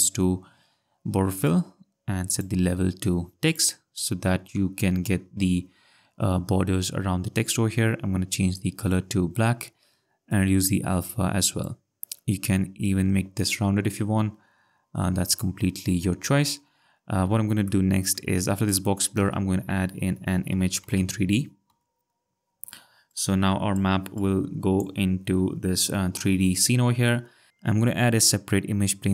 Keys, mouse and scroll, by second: 1.4 click, 5.6 ctrl+scroll, 8.1-8.9 scroll, 10.3 click, 12.8 click, 17.7 click, 18.1 click, 18.6 click, 20.7 shift+space, 22.5 m, 22.5 a, 22.6 g, 22.8 e, 23.0 Return, 24.2 click, 27.5 click.